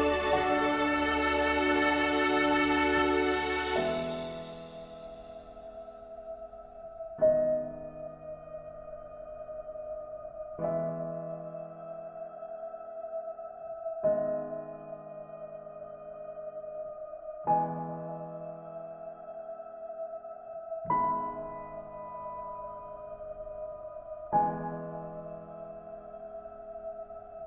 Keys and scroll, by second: 23.2 ctrl+alt+shift+e.